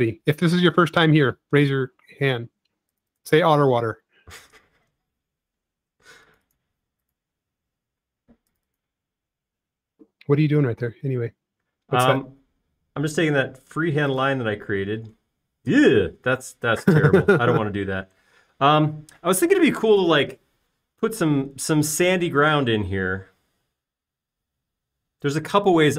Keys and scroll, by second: 0.9 space, 6.9 super+x, 16.3 |, 18.8 space, 22.5 super+z, 23.9 space.